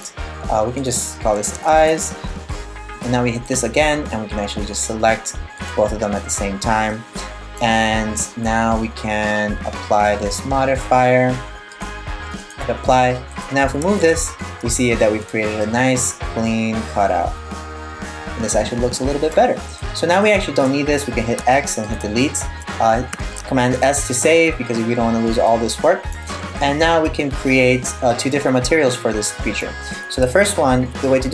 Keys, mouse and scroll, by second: 0.4 click, 0.5 click, 1.1 e, 3.0 right click, 4.3 click, 6.5 middle click, 11.3 click, 12.9 right click, 13.3 g, 15.2 middle click, 19.3 right click, 19.8 right click, 21.0 x, 22.7 super+s, 24.2-24.8 scroll up 1, 24.8 scroll up 2, 25.1 middle click, 26.2 right click, 26.6 middle click.